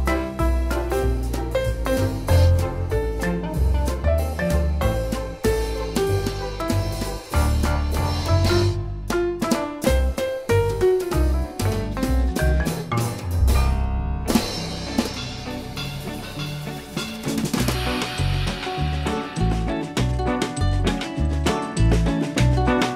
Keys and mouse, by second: 0.1 click, 3.3 click, 4.6 z, 5.1 click, 6.5 click, 9.1 right click, 11.2 click, 14.1 click, 18.7 click.